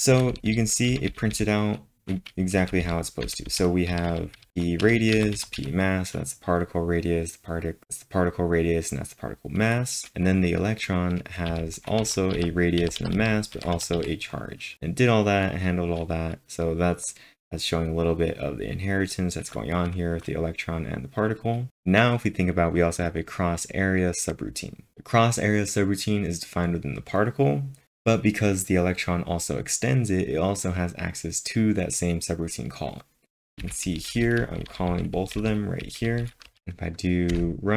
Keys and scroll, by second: 0.0-2.6 typing, 3.9-5.6 typing, 11.5-12.4 typing, 15.5 typing, 33.4-37.1 typing, 37.3 Return.